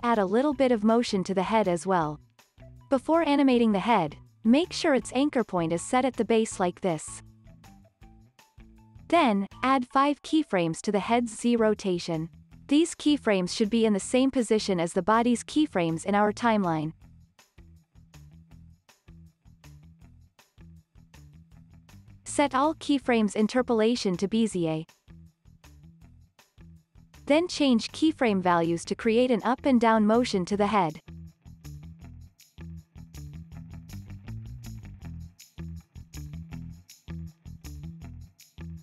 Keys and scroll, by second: 4.3 Tab, 7.3 Tab, 35.2 super+c, 36.0 super+v, 36.7 super+c, 37.9 x, 38.3 super+v, 38.7 x.